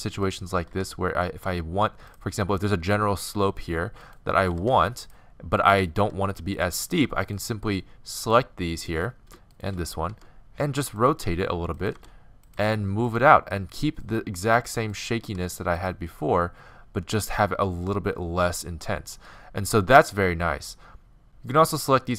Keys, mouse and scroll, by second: 0.3-0.7 right drag, 0.7-2.2 drag, 0.7 g, 2.2 middle drag, 4.1 right click, 4.2-11.3 drag, 4.5 g, 6.0 g, 10.2 r, 11.1 g, 11.3 middle click, 12.0 r, 12.6 g, 14.1-18.5 drag, 14.5 g, 15.3 g, 21.2 g.